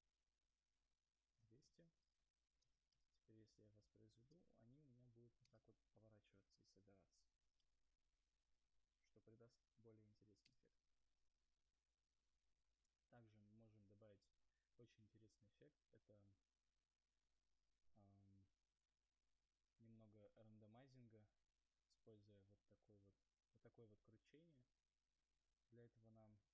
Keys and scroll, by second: 0.3 Escape, 4.7 Return, 5.2 space, 5.8 space, 14.0 alt+Tab.